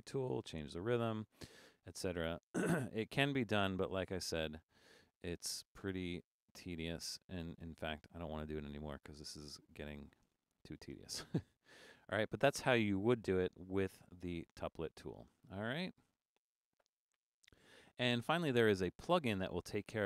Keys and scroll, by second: 0.3 6.